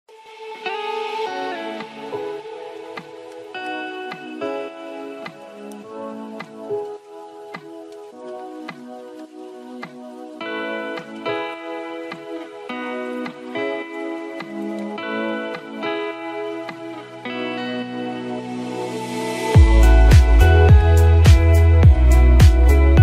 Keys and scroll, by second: 2.2 ctrl+e.